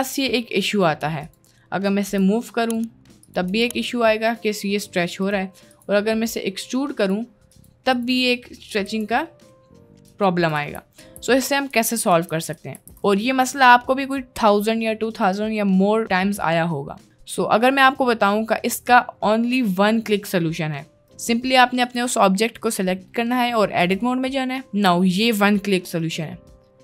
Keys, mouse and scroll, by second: 2.1 g, 3.6 g, 5.8 click, 7.0 click, 7.9 click, 8.9 e, 10.6 ctrl+z, 11.0 ctrl+z, 11.7 ctrl+z, 12.5 ctrl+z, 12.8 ctrl+z, 13.5 Tab, 13.7 middle click, 17.4 middle click, 17.8-19.2 middle drag, 21.0 middle click, 21.9 middle click, 23.8 Tab.